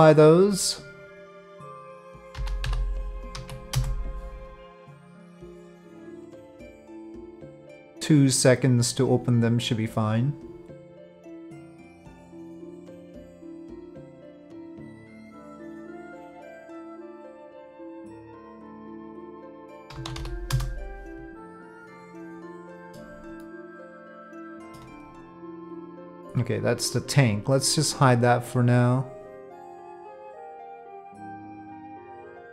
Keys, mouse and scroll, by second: 1.6-4.4 drag, 6.0-6.7 drag, 7.4-8.7 drag, 10.4 click, 13.5 click, 17.2-18.3 drag, 18.5-21.3 drag, 21.7-23.0 middle drag, 23.6-24.8 middle drag, 25.8 click, 30.8 click, 31.5 middle click.